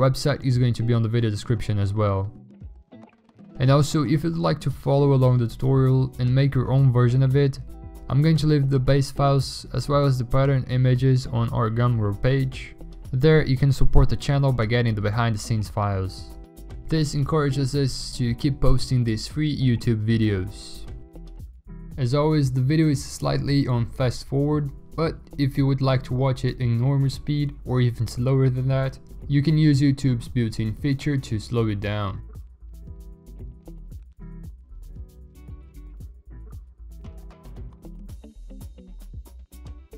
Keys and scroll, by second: 13.0 x, 13.3 alt+BackSpace, 13.4 ctrl+d, 14.0 ctrl+alt+z, 14.2 ctrl+alt+z, 14.6 ctrl+shift+i, 14.8 alt+BackSpace, 15.1 ctrl+d, 17.5 ctrl+u, 31.7 ctrl+i, 32.2 ctrl+i, 32.4 ctrl+u.